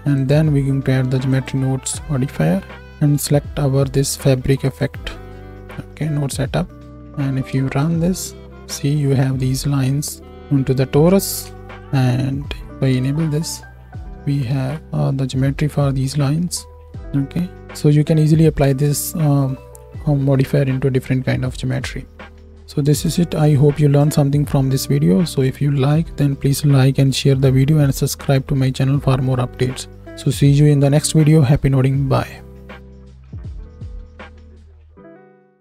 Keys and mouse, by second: 6.8 shift+Left, 6.8-9.9 shift+drag, 7.6 space, 11.4 space, 11.7 middle click, 13.2 m, 14.3 alt+right click, 14.5 alt+a, 16.7 click, 32.4 click, 32.5 right click.